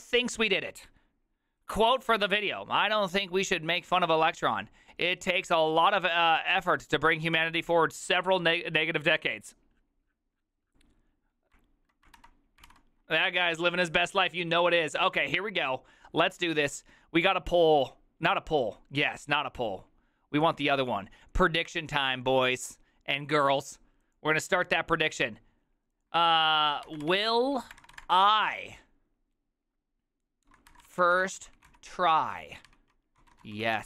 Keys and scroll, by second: 12.7 alt+h, 27.3-28.1 typing, 30.5-33.8 typing, 32.7 Tab.